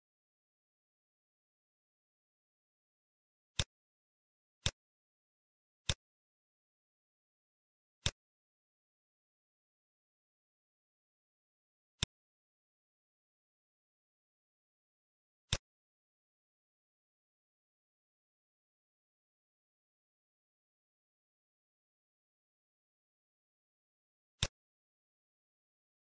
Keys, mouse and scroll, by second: 7.7 click, 10.2 middle click, 10.2 scroll up 4, 11.0 scroll up 2, 11.9 click, 16.7 middle click, 18.9-19.9 scroll up 4, 22.6 middle click, 22.6 scroll up 1.